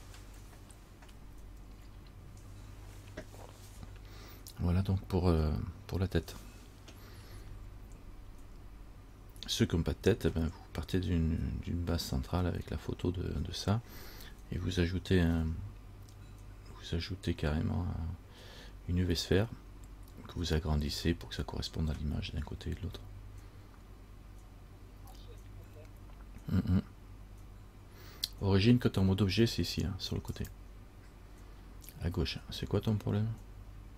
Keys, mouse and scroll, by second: 30.5 click.